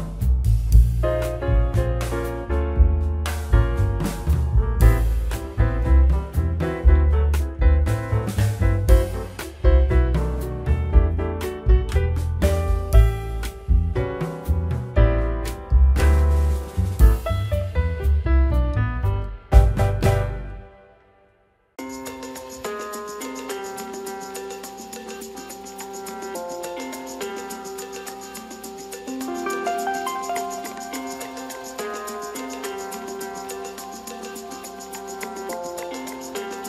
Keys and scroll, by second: 4.2 k, 5.9 Return, 7.6 k, 8.5 a, 9.1 Return, 9.8 k, 11.5 Return, 14.6 k, 15.6 a, 16.4 Return, 17.3 Tab, 17.3 1, 27.6 m.